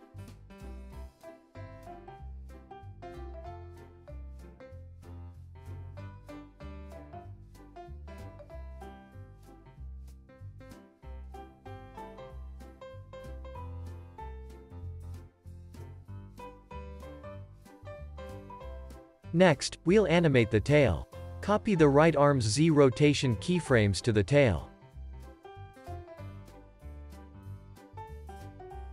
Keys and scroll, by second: 1.0 c, 8.6 space, 15.6 space, 15.9 super+s, 27.7 alt+x.